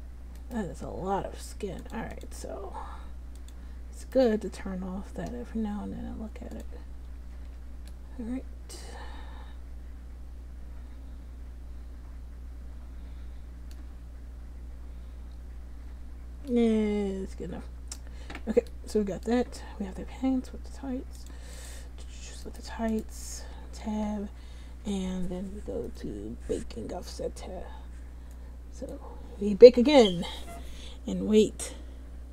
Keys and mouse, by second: 0.5-1.9 right drag, 1.9 middle click, 4.2-6.1 drag, 6.7 click, 7.4 ctrl+z, 9.1 middle click, 14.5-17.9 middle drag, 22.6 middle click, 23.0 click, 23.5 Tab.